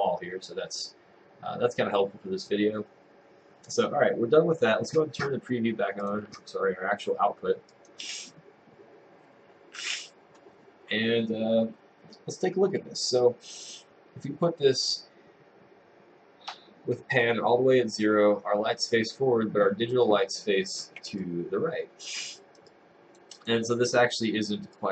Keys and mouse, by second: 21.4 click, 22.2 right click, 22.7 click, 23.4 click.